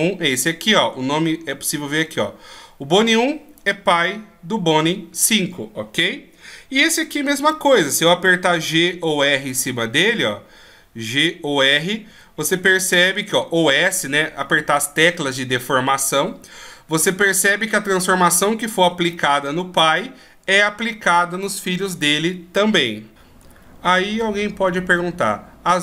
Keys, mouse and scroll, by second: 3.7 right click, 7.5 right click, 9.1 g, 12.8 s, 16.3 g, 19.0 r.